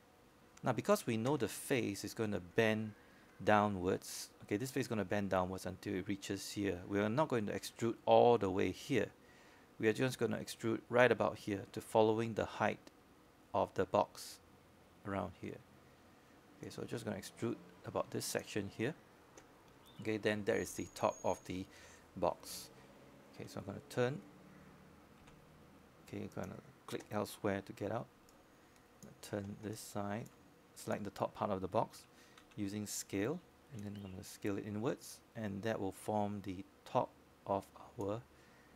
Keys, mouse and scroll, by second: 0.2 shift+right click, 3.3-6.6 drag, 7.0-12.9 scroll up 1, 12.9-24.6 drag, 28.8 middle click, 30.6 z, 30.6 z, 31.7 click, 33.8 alt+click, 35.0 alt+middle click, 35.2 alt+click, 36.3 click, 37.6 w.